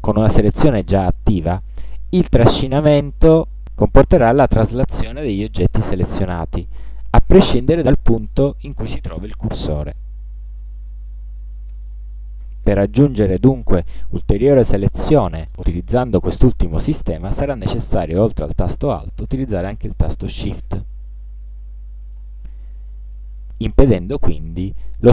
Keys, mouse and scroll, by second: 2.8-11.5 alt+drag, 21.0-22.4 alt+shift+drag.